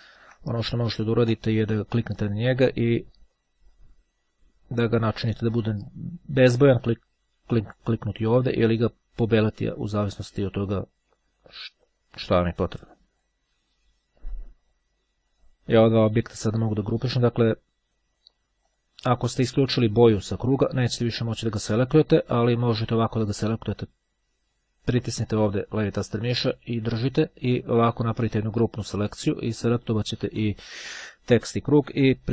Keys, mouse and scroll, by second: 0.9-2.0 drag, 7.8 click, 10.6 click, 12.7-13.8 ctrl+drag, 17.1 click, 18.8 click, 20.5-22.6 drag, 22.7-24.0 drag, 24.8-29.6 drag.